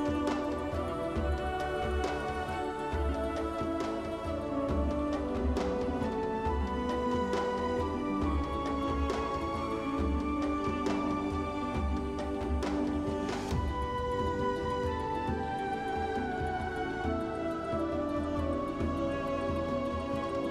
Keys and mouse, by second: 2.2 alt+shift+click, 11.1 shift+middle click, 11.4 middle click, 11.9 shift+middle click, 12.1 shift+middle click, 12.5 middle click, 12.8 shift+middle click, 15.1 click, 19.2 shift+click.